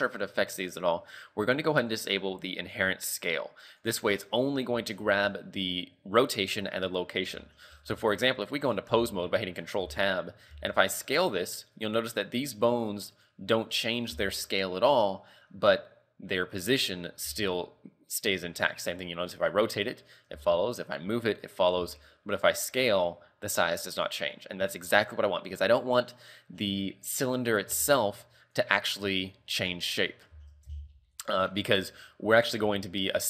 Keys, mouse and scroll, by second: 1.9 click, 2.8 right click, 3.8 click, 7.9 ctrl+Tab, 8.7 right click, 9.0 z, 9.3 scroll down 3, 9.7 scroll up 3, 9.9 z, 10.6 s, 12.4 right click, 13.2 right click, 13.7 right click, 14.2 s, 15.3-15.7 scroll down 1, 17.4 r, 20.4 g, 21.8 s, 24.6-26.2 scroll up 1, 26.2 right click, 26.2 scroll up 1, 27.9 ctrl+Tab, 28.5 right click, 29.2 right click, 30.4 ctrl+Tab, 31.2 right click, 32.1 Tab, 32.6 Tab, 33.0 right click.